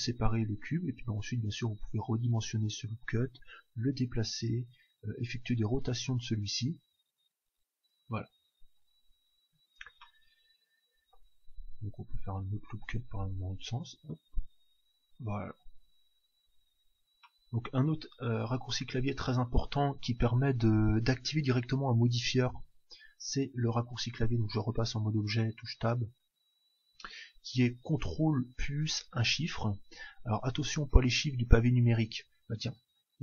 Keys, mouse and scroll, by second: 1.1 s, 2.8-6.1 drag, 3.2 g, 4.6 r, 10.1-12.1 middle drag, 11.6 ctrl+r, 13.6 s, 16.6-18.4 drag, 17.2-19.1 middle drag, 23.4 Tab, 24.5 Tab, 24.8 Tab.